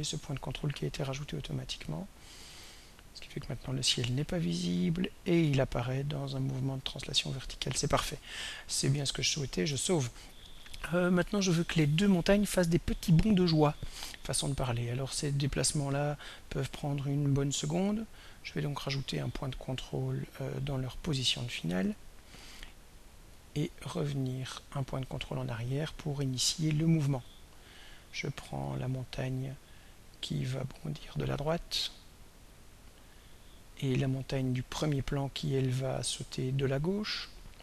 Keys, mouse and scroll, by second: 1.5 click, 3.0-9.4 drag, 9.9 ctrl+s, 18.1 click, 18.8 click, 20.1 click, 22.0 click, 23.4 click, 27.3 click, 28.6 click, 30.8-32.6 drag, 34.2 click, 36.0-37.6 drag.